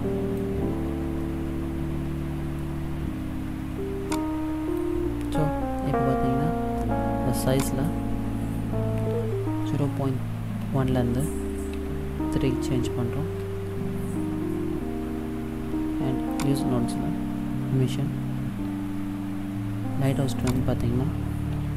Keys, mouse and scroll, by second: 1.4 middle click, 3.0 scroll down 2, 4.3 click, 7.6 click, 16.4 click, 20.5 click.